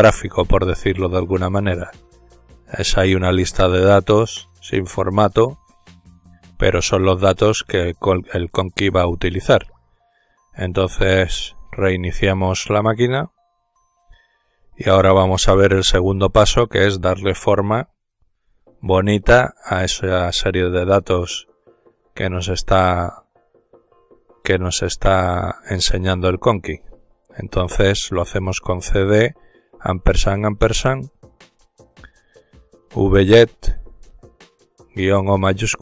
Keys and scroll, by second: 3.3 ctrl+z, 7.1-9.1 typing, 10.2-13.6 typing, 15.5 ctrl+alt+t, 22.8 typing, 25.7-26.8 typing, 28.4 typing.